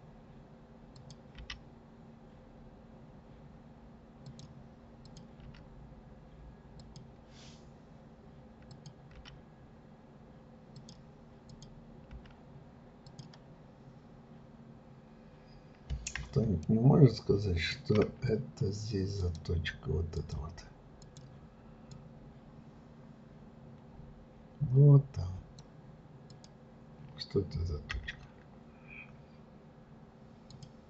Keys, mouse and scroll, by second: 0.9 click, 1.4 g, 5.0 click, 5.4 g, 8.7 click, 9.2 g, 11.5 click, 12.1 g, 13.5-14.0 scroll up 2, 16.6-18.3 shift+middle drag, 18.3-19.2 scroll up 1, 19.2 click, 20.2 click, 21.0 click, 21.9 click, 26.3 click, 27.9 Delete.